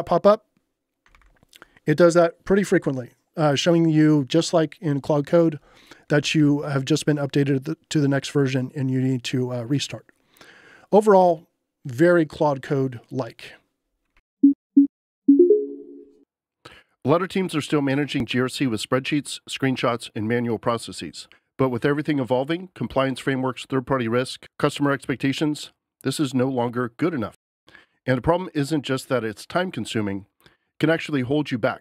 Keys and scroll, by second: 1.1 ctrl+l, 5.8-6.9 typing, 14.2 j.